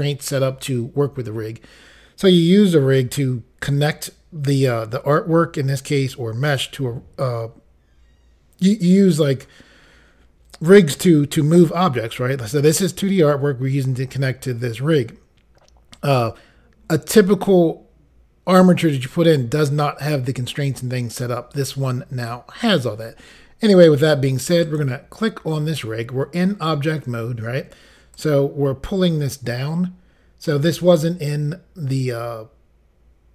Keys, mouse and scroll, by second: 24.7 click, 24.8 click, 28.2 click.